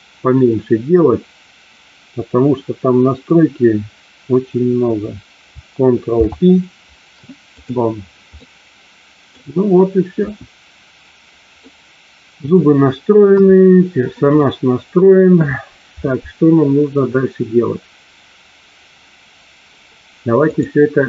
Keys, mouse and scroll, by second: 6.0 ctrl+p, 8.4-9.3 middle drag, 10.0 KP_1, 11.5-12.4 middle drag, 13.3 KP_2, 14.4-15.0 middle drag, 20.5-21.0 drag.